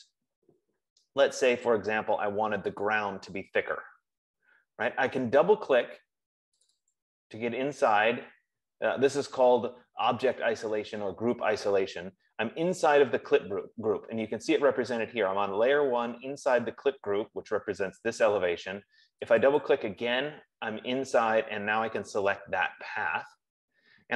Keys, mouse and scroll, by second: 0.9-1.9 scroll, 3.2 click, 7.0 click, 7.5 click, 19.7 click, 20.2 click.